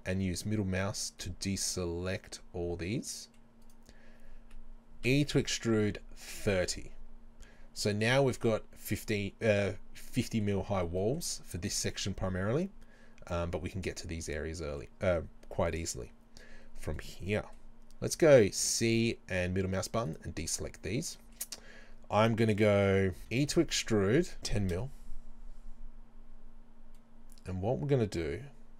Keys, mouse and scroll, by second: 3.7-6.4 right drag, 5.1 e, 6.4 KP_Enter, 9.0-20.2 middle drag, 18.6 c, 20.2 right click, 20.5-23.2 middle drag, 24.8 KP_Enter, 27.0-28.7 middle drag.